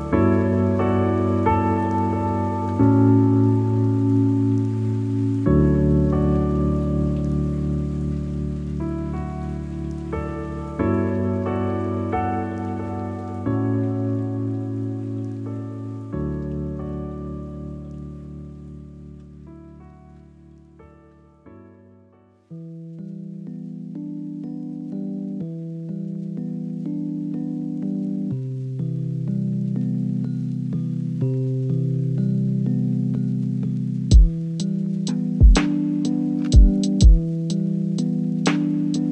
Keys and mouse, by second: 1.3-1.6 shift+middle drag, 1.8-4.9 middle drag, 7.0 click, 8.2 Tab, 9.5 shift+middle click, 12.2 shift+click, 13.0 click, 13.4 alt+z, 13.9 click, 14.9-15.9 drag, 16.7 shift+d, 18.0 p, 18.7 Tab, 19.7 click, 21.8 t, 23.3 click, 23.3 /, 24.1-27.1 drag, 27.9-30.5 drag, 31.7 click, 34.3 click, 35.4-37.2 drag, 38.7 click.